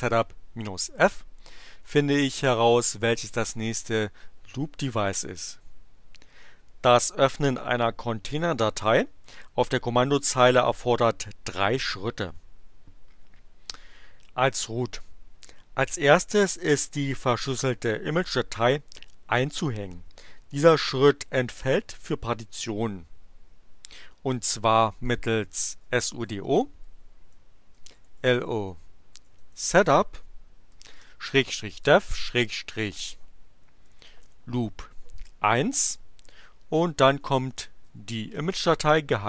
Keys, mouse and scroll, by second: 25.0 click, 25.5-35.2 typing, 36.3-39.2 typing.